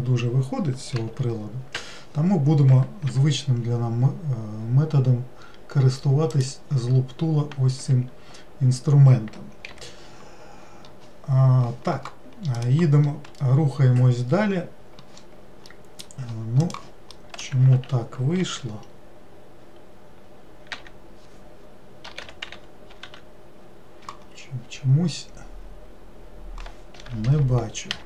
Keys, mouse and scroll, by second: 0.9 g, 6.3-7.8 drag, 7.8 Escape, 9.7 n, 15.7-17.7 middle drag, 17.7 ctrl+z.